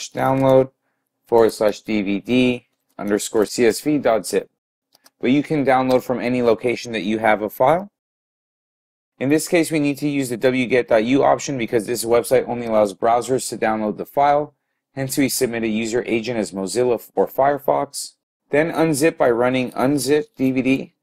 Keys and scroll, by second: 0.4 typing, 2.6-3.3 typing, 5.0 typing, 20.4-21.0 typing.